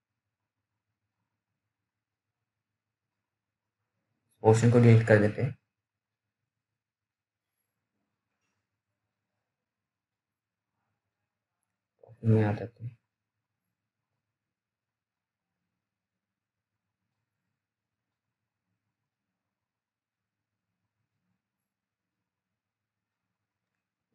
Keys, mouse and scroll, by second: 0.0 scroll down 1, 0.3 alt+middle click, 1.1 click, 1.2 click, 2.8 alt+middle click, 4.4 Delete, 5.2 scroll up 1, 5.5 click, 5.9 Delete, 6.3-7.4 scroll down 1, 7.4-7.7 scroll up 1, 7.7-8.9 scroll down 1, 9.0 alt+middle click, 10.1 right click, 10.8 click, 11.9 middle click, 12.6-13.0 scroll up 1, 13.0-14.3 scroll down 1, 14.3 click, 22.3 click.